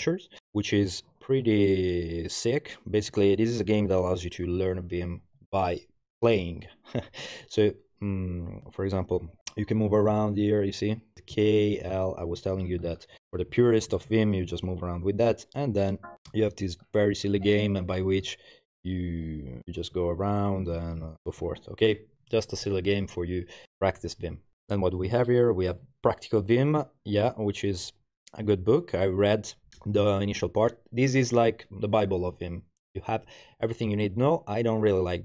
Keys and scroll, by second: 8.6 Return, 10.1-21.9 typing.